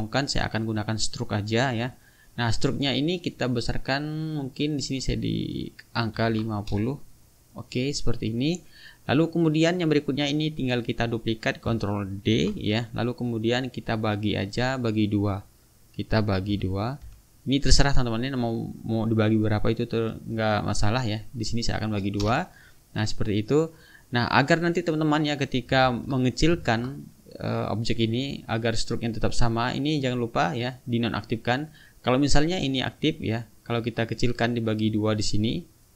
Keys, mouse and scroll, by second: 3.6 click, 4.8 click, 6.2 KP_5, 6.3 KP_0, 6.7 Return, 8.2 click, 9.0 middle click, 9.5 click, 10.3 click, 12.3 ctrl+d, 14.3 click, 16.4 KP_Divide, 17.1 KP_2, 22.2 Return, 24.2 click, 25.8 ctrl+z, 33.0 click, 34.8 click.